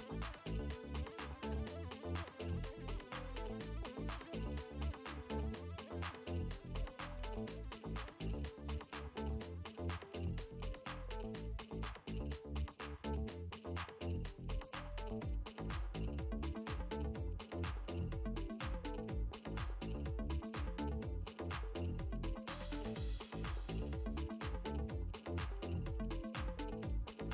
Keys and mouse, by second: 12.8 click, 15.6 click, 17.2 click, 19.3 alt+m, 19.5 alt+i, 21.0 click, 25.9 click.